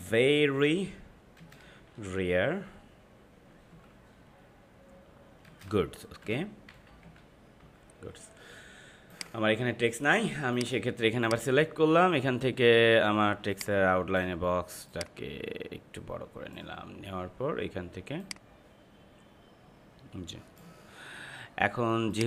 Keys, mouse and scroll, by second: 0.0-2.1 typing, 3.9 typing, 5.4-7.5 typing, 9.1 click, 13.5-22.2 drag.